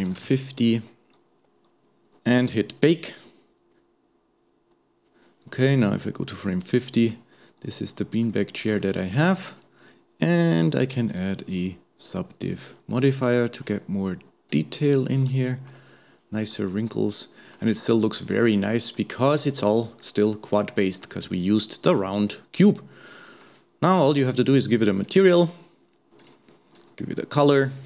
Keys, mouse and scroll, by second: 2.4-4.9 drag, 5.1-6.0 scroll down 1, 6.0 click, 6.7-7.1 scroll up 2, 7.1-8.5 middle drag, 8.5-8.8 scroll up 1, 8.8-10.3 shift+middle drag, 10.3 click, 11.1-13.0 drag, 13.0-14.5 middle drag, 14.5 click, 15.3-17.8 middle drag, 17.8-18.7 scroll up 2, 18.9-20.2 middle drag, 20.2-20.7 scroll down 1, 20.7-24.3 middle drag, 24.3 click, 25.0 click, 26.2 click.